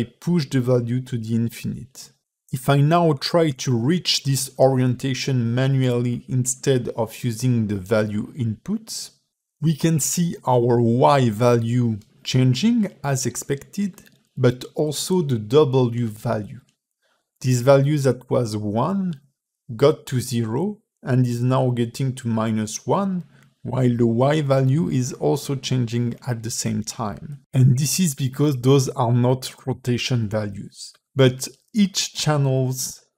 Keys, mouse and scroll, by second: 4.1 click, 4.9 r, 15.8 r.